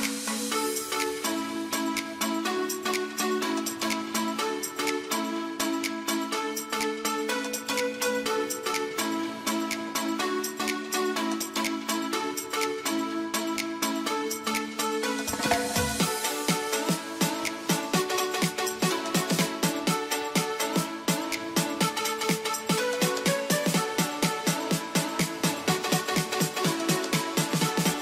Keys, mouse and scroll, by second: 1.0 ctrl+r, 1.7 click, 1.8 ctrl+r, 2.3-12.1 drag, 12.1-14.3 shift+drag, 14.3 F3, 15.4 alt+click, 16.1 g, 16.6-19.9 drag, 19.9-22.3 shift+drag, 22.4 shift+e, 23.0 click, 23.4 ctrl+z, 25.3 click, 27.2-28.0 shift+drag.